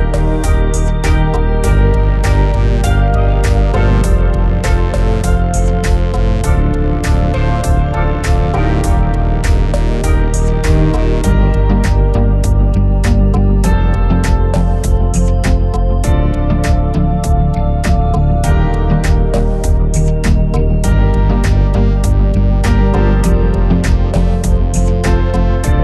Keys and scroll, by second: 4.8-5.6 typing.